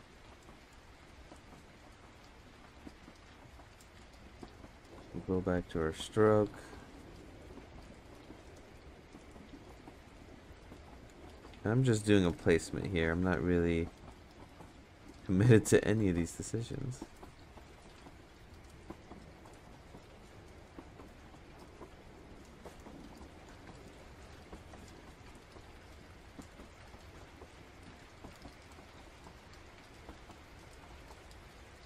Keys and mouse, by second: 0.3 Tab, 5.1 click, 6.8-7.9 drag, 8.2 click, 8.7 click, 10.1 ctrl+z, 11.0 shift+click, 12.4 ctrl+z, 13.9 shift+click, 15.7 ctrl+z, 16.1-17.5 shift+drag, 18.0 ctrl+z, 18.4 shift+click, 20.4 ctrl+z, 21.2-22.6 shift+drag, 23.7 ctrl+z, 25.8 ctrl+z, 26.2 click, 28.0 ctrl+z, 28.6-30.1 drag, 30.9 ctrl+z, 31.3 click.